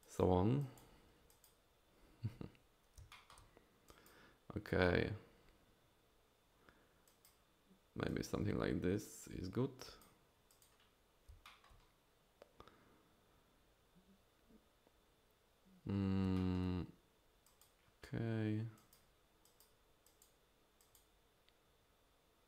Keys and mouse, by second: 0.0 drag, 0.6 drag, 1.3 drag, 3.1 shift+click, 3.9 drag, 7.1 click, 8.1 drag, 9.0 drag, 9.8 drag, 10.5 click, 11.5 shift+click, 16.4 shift+click, 17.4 drag, 18.8 drag, 19.4 drag, 20.1 drag, 20.8 drag.